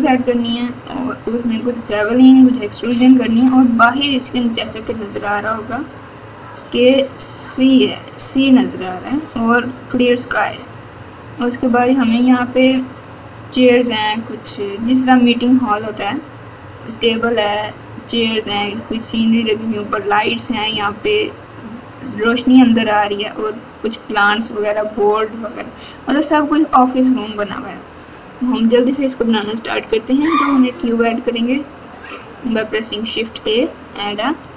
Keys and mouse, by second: 30.2 shift+a.